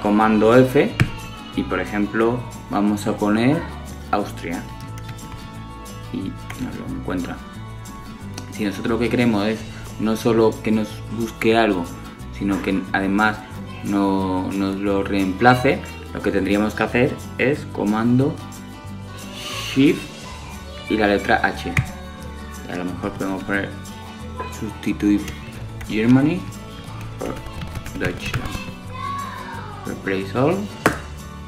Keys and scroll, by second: 18.9 shift+super+h.